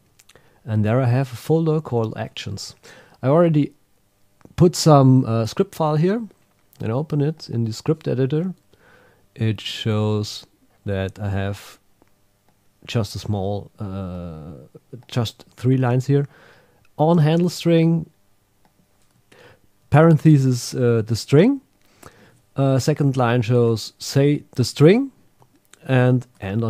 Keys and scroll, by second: 1.7 Right, 1.9 Return, 19.2 super+q, 22.7 Down, 23.2 shift+super+Left, 25.4 Down, 26.0 shift+super+Right.